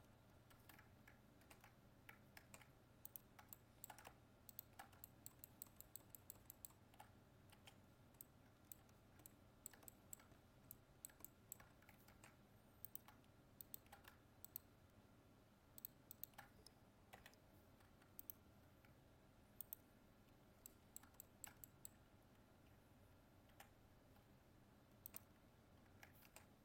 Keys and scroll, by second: 1.4 ctrl+Tab, 12.1 ctrl+Tab, 26.2 ctrl+Tab.